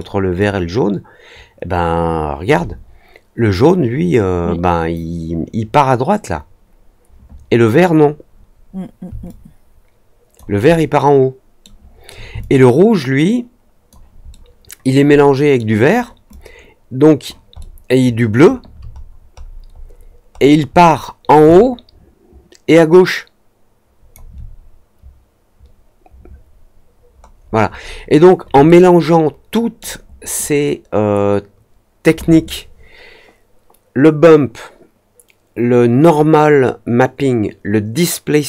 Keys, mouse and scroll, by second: 0.3-2.4 alt+drag, 9.2-10.3 alt+drag, 10.6-11.6 alt+middle drag, 12.3-13.8 alt+drag, 12.3 alt+right click, 14.2-15.5 alt+middle drag, 16.2-17.2 alt+drag, 17.5-18.4 alt+middle drag, 18.9 middle click, 19.3 middle click, 19.7 middle click, 20.3 middle click, 20.7 middle click, 21.4-24.1 alt+drag, 26.9 middle click, 26.9-27.2 scroll up 1, 27.4 middle click, 27.7 middle click, 28.6-29.7 alt+middle drag, 30.3-32.0 alt+drag.